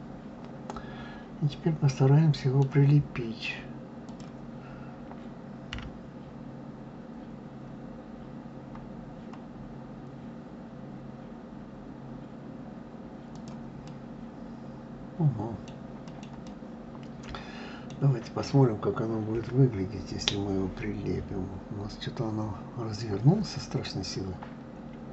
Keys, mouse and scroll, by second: 3.9 click, 5.5 g, 13.6-19.1 middle drag, 19.1 KP_1.